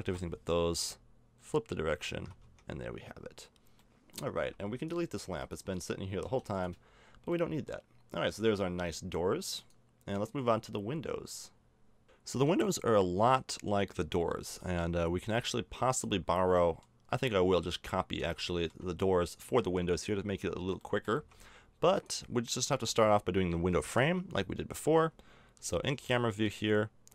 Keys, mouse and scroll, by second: 1.4 middle click, 2.1 a, 2.4 Tab, 4.0 middle click, 4.4 a, 6.2 x, 6.9 middle click, 7.3 middle click, 9.4 middle click, 9.6-11.9 drag, 12.0 middle click, 13.0 middle click, 13.3-14.1 scroll up 1, 14.1 middle click, 15.9 click, 16.6-17.9 middle drag, 20.0 click, 21.0 middle click, 21.1 Tab, 23.9 middle click, 24.6 KP_0, 25.6 z.